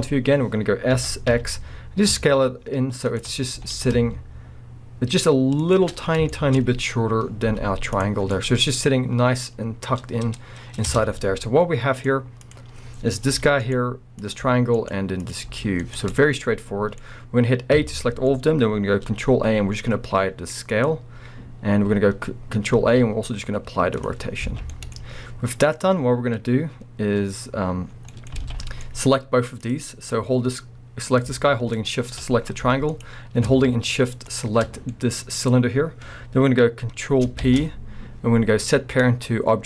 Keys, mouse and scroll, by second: 0.0-3.2 middle drag, 0.9 s, 3.3 scroll, 3.6 s, 6.0 scroll, 6.3-7.2 shift+middle drag, 6.6 scroll, 7.3 scroll down 2, 7.5-12.5 middle drag, 7.5 z, 8.2 scroll, 8.7 scroll, 10.8 Tab, 11.3 z, 12.5 click, 13.3 g, 13.7 right click, 14.2 click, 14.5 g, 14.9 right click, 15.2 click, 15.5 g, 15.9 right click, 16.1-20.8 middle drag, 17.8 a, 19.2 ctrl+a, 24.5 alt+a, 24.5-25.7 middle drag, 24.9-25.7 scroll up 2, 25.7 click, 26.4-27.2 scroll up 2, 27.2-27.9 scroll down 2, 27.9 scroll down 1, 28.1-29.6 middle drag, 28.4 alt+a, 28.6-29.6 scroll up 4, 29.6 click, 31.8 shift+click, 32.6 g, 33.1 right click, 34.3 shift+click, 34.7 scroll down 1, 34.9-39.6 middle drag, 35.5-37.4 scroll up 2, 37.4 ctrl+p.